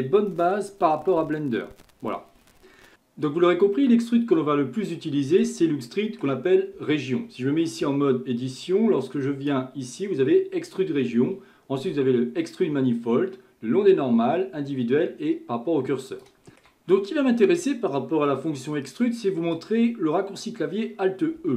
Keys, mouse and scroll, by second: 2.9-7.8 shift+middle drag, 7.8 Tab, 9.5-12.7 drag, 16.1 shift+middle click, 18.3-21.4 middle drag, 21.4 Tab.